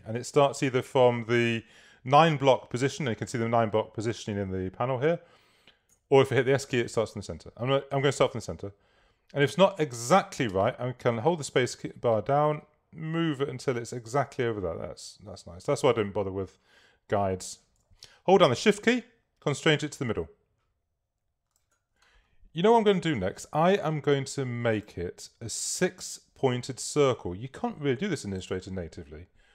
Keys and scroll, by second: 6.0 s, 10.6 space, 23.0 shift+x.